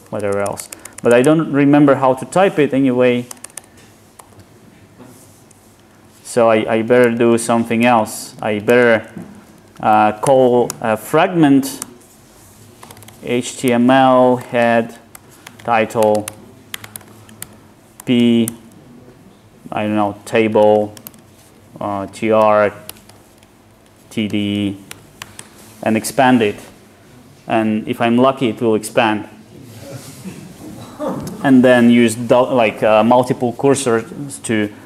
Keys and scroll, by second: 5.4 Return, 8.7 alt+shift+Left, 10.7 alt+Return, 28.6 Tab.